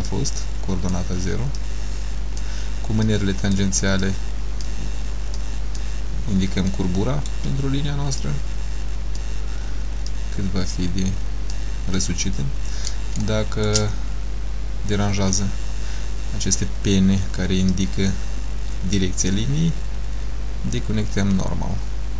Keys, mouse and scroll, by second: 0.2 click, 1.7 click, 3.2 click, 4.2 click, 5.5 click, 6.5 scroll down 2, 6.8 middle click, 8.3 click, 10.2 click, 12.1 middle click, 13.3 shift+middle click, 14.2 scroll up 2, 17.8 click.